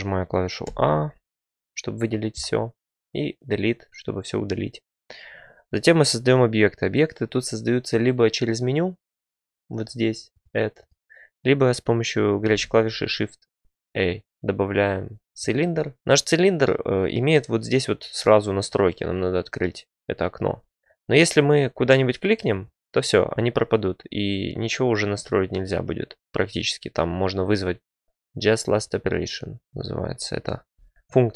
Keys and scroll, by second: 0.6 a, 3.0 Delete, 12.4 a, 27.9 typing.